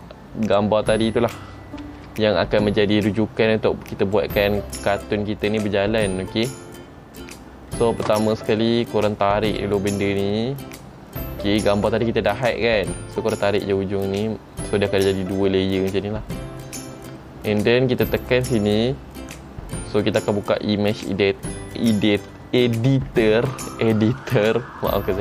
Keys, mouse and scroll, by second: 0.6 click, 2.0 shift+c, 4.3 click, 9.7 click, 18.3 click.